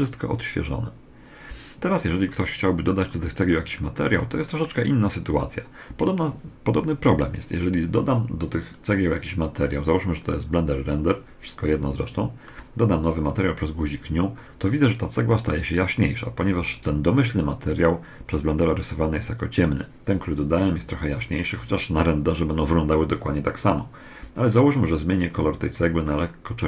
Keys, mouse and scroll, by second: 2.0-6.3 middle drag, 8.4-11.1 drag, 11.5-13.3 middle drag, 13.5 click, 24.3 click.